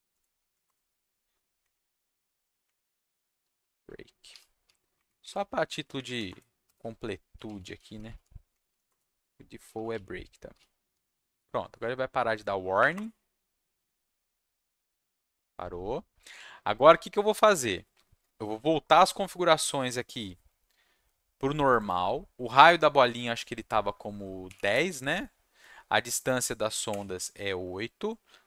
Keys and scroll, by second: 0.0-0.4 typing, 0.6 Return, 1.6 Up, 2.3 Down, 2.6 Up, 2.8 Tab, 3.1-4.6 typing, 4.9 shift+Up, 5.7 Down, 5.9 Up, 6.3 Return, 6.6-11.8 typing, 8.8 Return, 9.2 Tab, 12.8 Up, 12.9 Return.